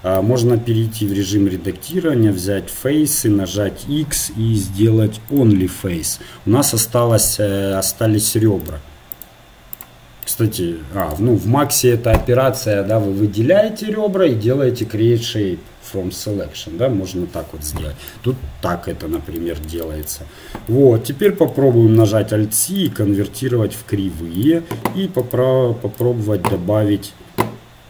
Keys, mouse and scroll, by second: 0.1 Tab, 2.0 ctrl+Tab, 5.4 x, 8.7 ctrl+Tab, 9.1 click, 20.7 Tab, 22.0 alt+c, 26.0-27.8 drag.